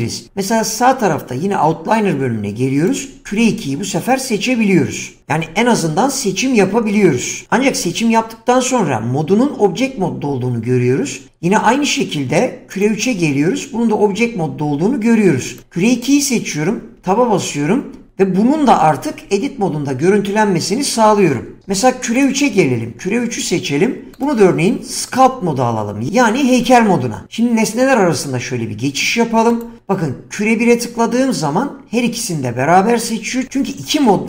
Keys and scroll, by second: 17.0 Tab.